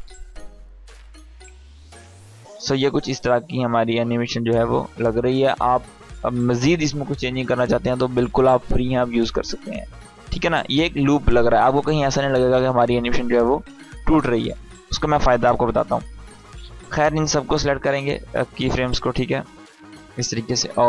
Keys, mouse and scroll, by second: 13.6 space, 16.7 click, 17.3 ctrl+a, 18.0-20.5 drag.